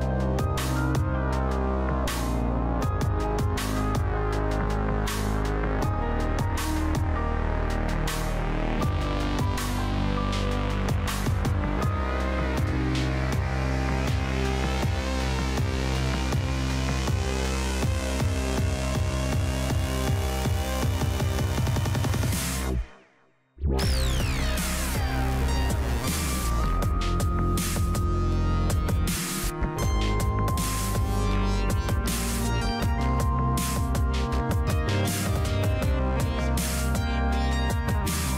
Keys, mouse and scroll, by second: 0.4 f, 1.2 click, 1.7-4.1 middle drag, 4.1 click, 9.0-15.5 middle drag, 15.7 click, 16.7 middle click, 17.3 click, 19.8 right click, 20.6 click, 21.2 middle click, 22.1 click, 28.0-29.6 middle drag, 31.4 click, 32.9 1, 35.8-38.3 drag.